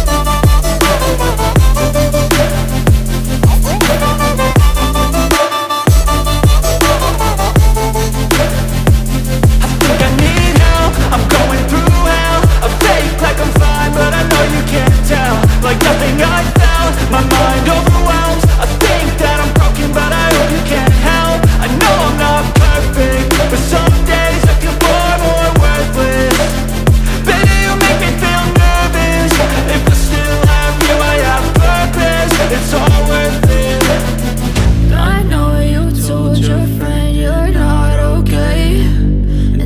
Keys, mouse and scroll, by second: 1.0 click, 2.7 click, 3.4 F4, 3.9 click, 4.6 click, 6.6 F9, 10.2 scroll up 1, 11.6 scroll down 1, 11.9 click, 12.5-12.9 scroll up 1, 12.9 scroll down 1, 13.3 scroll up 1, 14.5 click, 14.9 scroll down 1, 16.4 F4, 19.6 ctrl+o, 21.7 click, 25.4 F4, 26.1 click, 26.8 click, 27.5 click, 28.0 click, 28.8 click, 29.6 click, 32.6 click, 33.0 click, 34.2 click, 35.2 double click, 36.5 click, 36.7 double click, 37.3 ctrl+v.